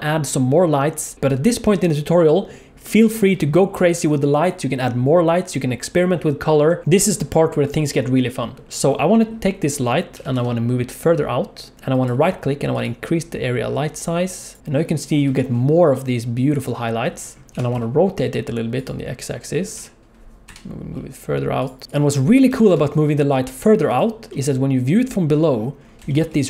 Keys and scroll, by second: 10.1 g, 17.5 r, 19.7 g, 22.5 g.